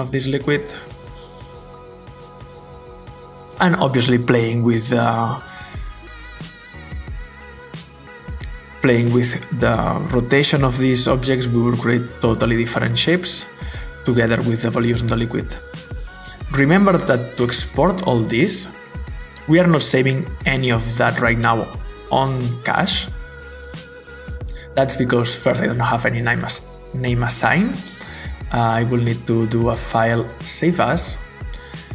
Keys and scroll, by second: 0.7 Return, 0.7 typing.